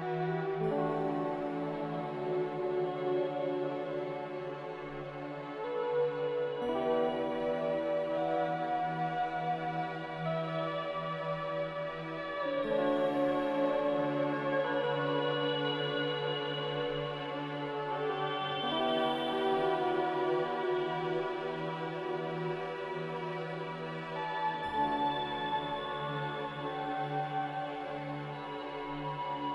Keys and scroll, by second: 3.0 ctrl+b, 7.4 ctrl+z, 7.7 ctrl+z, 9.2 x, 26.3 x.